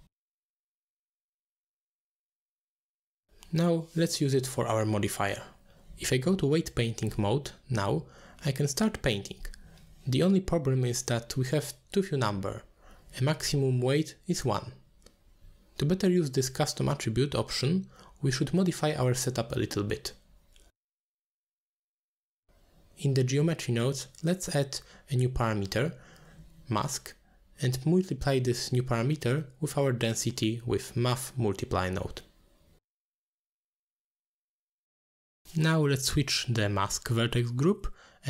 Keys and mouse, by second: 1.8-3.2 drag, 3.6 middle click, 3.9 Tab, 5.8-10.4 drag, 10.9 Tab, 13.2-14.5 drag, 15.8-16.5 middle drag, 17.9 middle click, 19.0 middle click, 20.2 middle drag, 22.1 click, 22.9 ctrl+h, 23.3 middle click, 23.7 click, 25.0-26.8 drag, 27.4 click, 27.5-28.4 drag, 29.0 click, 29.2-30.5 drag, 31.1-31.5 drag, 32.0 click, 32.3 ctrl+h, 34.8-35.9 shift+drag, 36.6 click.